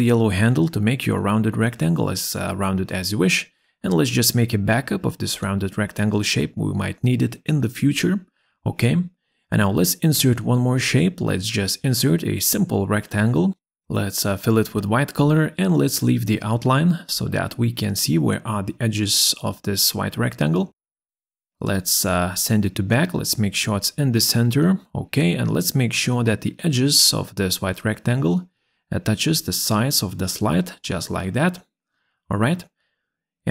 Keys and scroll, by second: 0.5 ctrl+c.